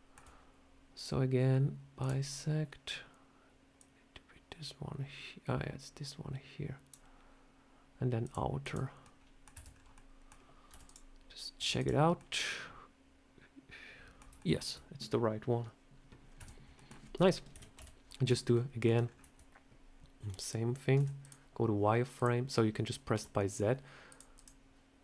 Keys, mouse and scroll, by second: 0.8 click, 8.1 click, 8.5 click, 8.9 middle click, 9.4 Tab, 9.6 scroll down 3, 9.8 middle click, 10.6 z, 10.7 click, 11.5 z, 12.1 middle click, 14.3 shift+middle click, 16.1 scroll up 2, 16.3 Tab, 16.6 middle click, 17.4 KP_7, 17.7 a, 18.4 shift+middle click, 18.9 scroll down 2, 20.8 z, 22.0 click, 23.0 z, 24.2 click.